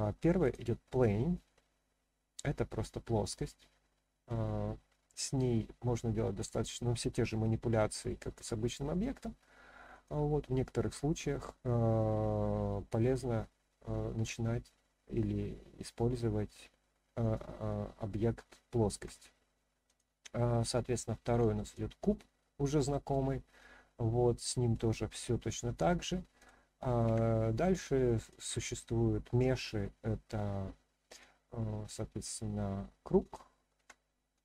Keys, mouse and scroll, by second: 1.5-4.2 middle drag, 6.1-9.2 scroll down 2, 6.6-9.2 scroll up 1, 9.2-9.6 scroll up 1, 9.9 click, 18.9 Delete, 19.8-21.7 drag, 22.4-23.1 middle drag, 23.4-23.9 scroll down 1, 23.9-24.7 middle drag, 26.4 click, 27.0 Delete, 28.2-31.2 drag, 33.2 click, 33.8 Delete, 34.3 click.